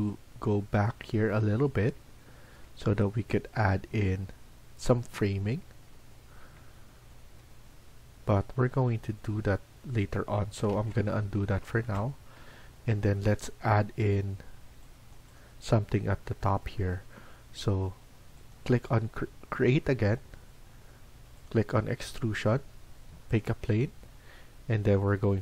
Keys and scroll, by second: 10.6 ctrl+z.